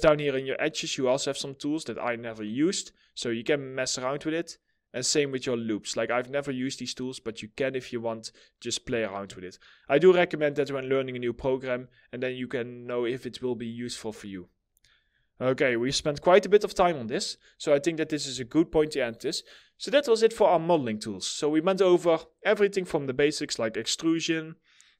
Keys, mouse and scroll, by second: 11.2-11.7 scroll down 1, 12.2 middle click, 13.0 scroll up 1, 14.4 middle click, 16.5 middle click.